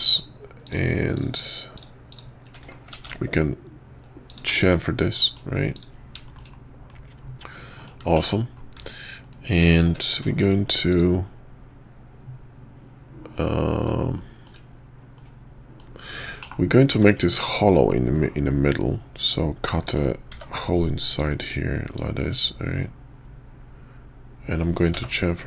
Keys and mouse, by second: 0.1 shift+click, 1.1 shift+click, 1.7 shift+click, 2.1 shift+click, 2.9 ctrl+b, 4.6 Tab, 5.2 middle click, 5.7 click, 6.2 shift+middle click, 7.8 middle click, 8.0 `, 8.1 /, 9.2 KP_5, 9.7 shift+click, 10.3 shift+click, 10.9 click, 14.1-14.4 shift+drag, 15.1-15.8 middle drag, 16.4 /, 16.9 `, 19.3-19.9 drag, 20.3 d, 21.9-25.4 drag.